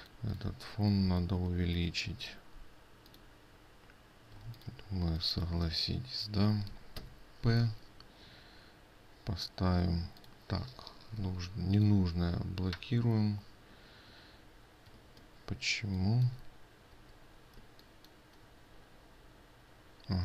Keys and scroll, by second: 11.7 ctrl+2, 12.7 ctrl+2, 15.5 ctrl+space, 17.5 ctrl+z, 18.2 ctrl+space.